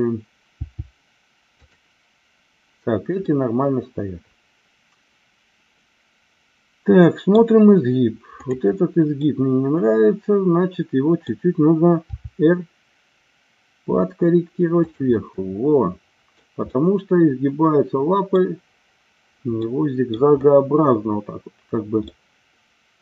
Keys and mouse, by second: 0.5 g, 3.1-7.3 middle drag, 8.4-9.6 drag, 9.6-11.3 middle drag, 12.2 r, 14.8 click, 15.1-16.3 middle drag, 16.7-18.3 middle drag, 19.7 middle click, 22.0-23.0 middle drag.